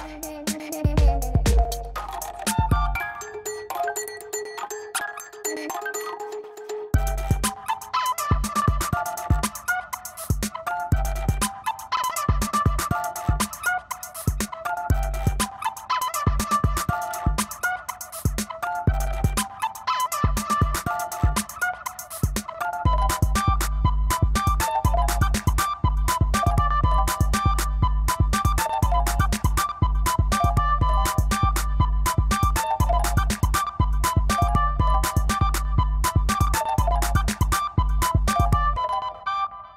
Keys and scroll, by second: 0.4 [, 2.2 space, 2.6 space, 4.0 ], 4.3 1, 8.3 space, 8.8 space, 10.2 space, 11.6 v, 11.8 space, 12.6 ctrl+shift+], 12.8 space, 13.7 ctrl+space, 14.8 e, 15.2 [, 15.8 2, 17.1 ], 21.1 [, 23.4-25.8 typing, 28.8 space, 36.5 space, 36.8 space, 38.3 ].